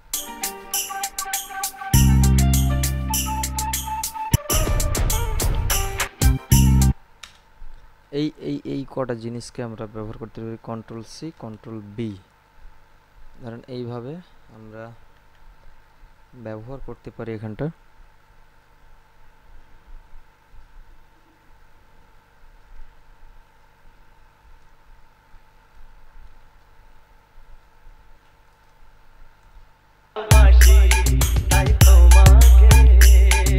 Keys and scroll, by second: 0.5 space, 7.0 space, 10.8 ctrl+c, 11.8 ctrl+b, 14.8 Right, 26.1 ctrl+b, 30.4 space.